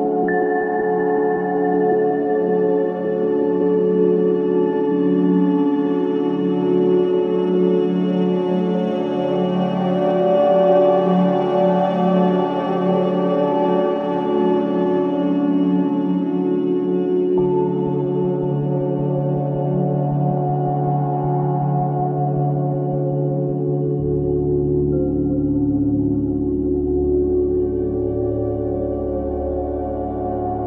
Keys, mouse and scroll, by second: 1.4 click, 8.4 scroll up 1, 9.3 click, 13.4 scroll down 1, 13.9 scroll up 1, 16.3 click, 21.1 click, 21.7-22.1 scroll down 1, 22.2 right click, 23.3-23.7 scroll down 1, 24.3 click, 25.6-26.0 scroll down 1, 26.2-26.5 scroll up 1.